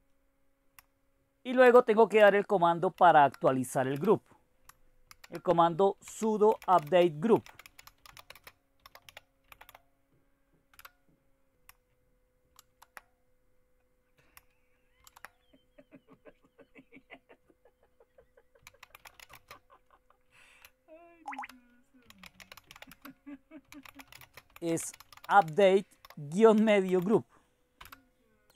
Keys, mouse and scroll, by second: 1.4 alt+Tab, 1.6 Return, 2.2 Return, 2.9 ctrl+o, 3.9 Return, 5.1 ctrl+x, 5.7 alt+Tab, 5.8-11.3 typing, 12.5 alt+Tab, 15.0 alt+Tab, 18.4-28.3 typing.